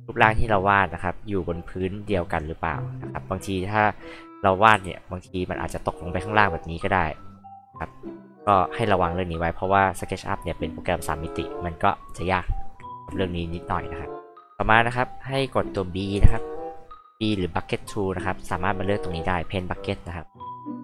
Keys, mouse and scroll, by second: 4.7 alt+r, 5.8 alt+click, 6.3 alt+click, 8.3 ctrl+alt+z, 13.0 alt+h, 14.0-14.3 alt+drag, 16.2 alt+b, 17.9 alt+click.